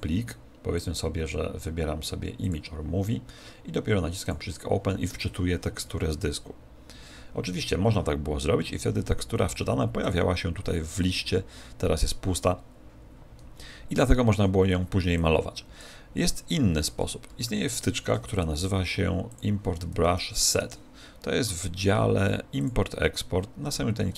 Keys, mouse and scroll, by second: 0.7 click, 4.2 click, 5.8 Escape, 10.0 click, 15.1 click, 17.8 ctrl+alt+u.